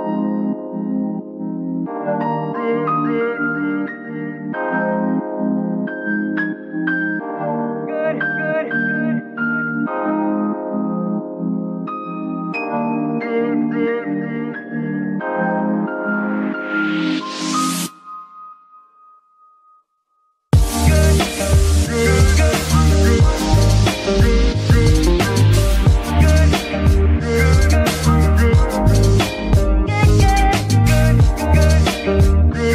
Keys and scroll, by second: 1.3 g, 3.5 g, 7.3 shift+z, 8.7 Tab, 9.1 Tab, 12.7 g, 13.3 Escape, 28.8 g, 29.1 Escape, 30.0 KP_3, 30.7 Tab, 31.3 s, 32.3 Tab.